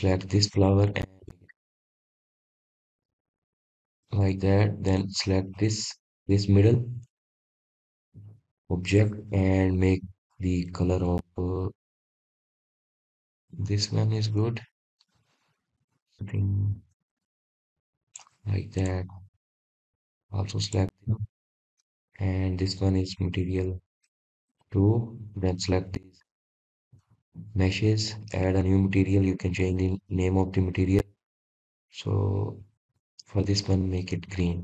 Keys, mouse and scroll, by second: 4.3-7.3 drag, 8.3-8.6 scroll up 1, 8.9-9.2 scroll down 1, 10.0-10.3 scroll up 1, 11.0 click, 13.6-14.9 drag, 19.0 scroll up 2, 20.2 click, 22.8-25.8 drag, 29.6-31.9 drag.